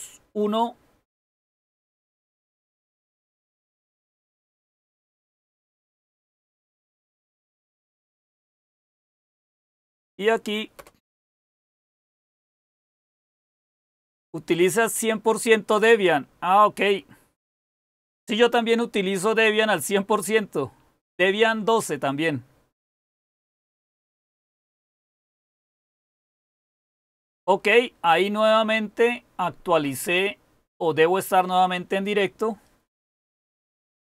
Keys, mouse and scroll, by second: 9.6 Up, 10.6 Return.